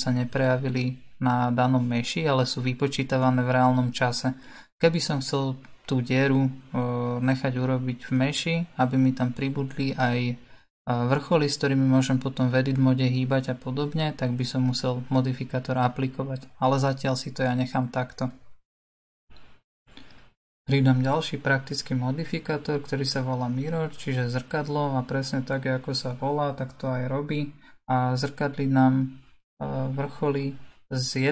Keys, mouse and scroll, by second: 16.6 scroll down 1, 16.8 scroll up 1, 16.9-17.5 scroll down 2, 17.6-19.8 scroll down 2, 19.8-31.3 drag.